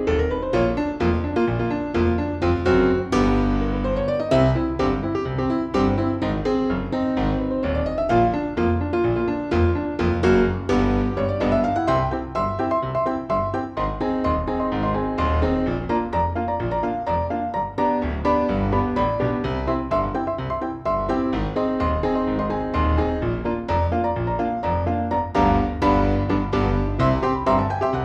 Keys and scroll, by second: 2.2 space, 3.4 ctrl+i, 7.7 p, 12.5 shift+F2, 13.7 Escape, 14.4 Delete, 18.8 F4, 21.8 Delete, 22.5 F2, 26.8 c.